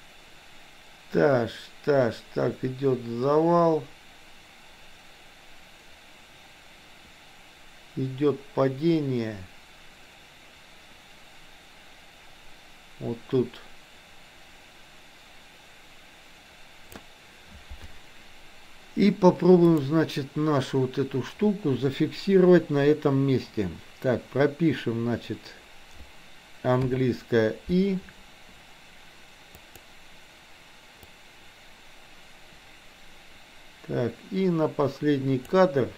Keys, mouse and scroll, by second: 19.6 click, 29.6 click, 31.1-35.6 drag.